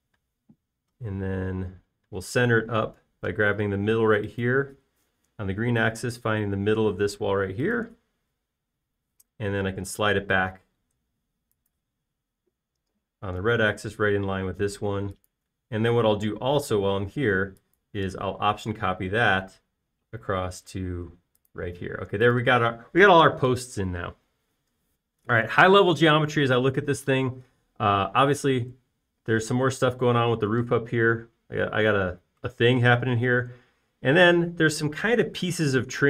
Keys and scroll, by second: 0.7 m, 23.1 space.